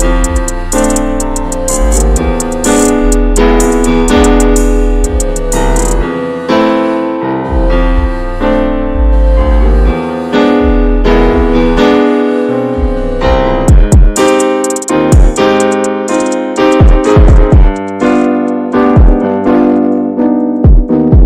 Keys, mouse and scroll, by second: 0.4 click, 0.5 ctrl+a, 0.9 click, 1.1-2.6 middle drag, 2.6 scroll up 2, 2.8 Tab, 3.0 middle click, 3.6-4.3 scroll up 2, 3.8 shift+middle click, 4.3 alt+shift+click, 5.2-6.5 drag, 6.5 ctrl+z, 6.7 middle click, 7.5 click, 7.8-8.4 scroll down 3, 8.0 l, 8.4 middle click, 9.0 click, 9.6 ctrl+z, 9.8 click, 10.0 Tab, 10.3-10.8 shift+middle drag, 10.8 scroll up 1, 10.9 scroll down 2, 11.1 middle click, 11.2 scroll up 1, 11.3 scroll down 2, 11.5-12.1 shift+middle drag, 12.1 scroll down 1, 12.3 shift+middle drag, 12.6 scroll up 1, 12.7 scroll down 1, 12.8-13.3 middle drag, 13.3 scroll up 1, 13.4 scroll down 1, 13.6-14.3 middle drag, 14.3-14.9 scroll up 2, 14.3 ctrl+s, 14.6 shift+middle click, 14.9 Tab, 15.2 click, 15.5-16.5 middle drag, 16.5 scroll down 2, 16.7 Tab, 16.9 click, 17.1 scroll down 1, 17.2 shift+middle click, 17.9 scroll up 1, 18.1 Tab, 18.2 click, 18.8 l, 19.6 x, 20.7 Tab, 20.8 click, 21.1 middle click.